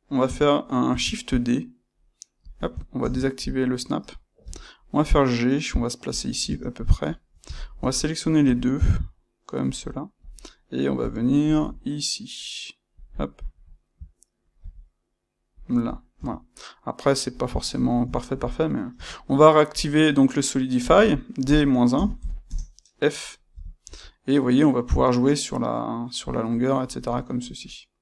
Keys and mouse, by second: 0.8 shift+d, 2.4 click, 2.9 shift+Tab, 4.4 g, 6.2 click, 6.4 Tab, 7.5 shift+click, 8.4 g, 10.1 click, 10.9 g, 13.0 click, 14.5 g, 15.6 click, 16.1 Tab, 17.0-28.0 middle drag, 18.8 space.